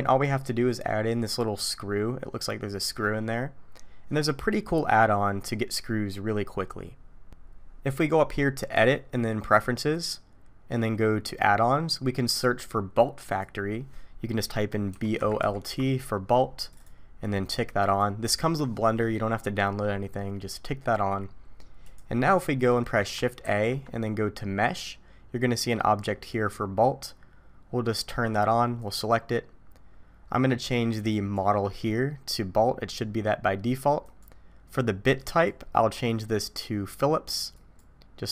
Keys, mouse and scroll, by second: 0.8 scroll down 1, 1.0-2.1 scroll down 1, 8.7 click, 22.5 middle click, 23.4 shift+a, 31.1 click, 35.2 click.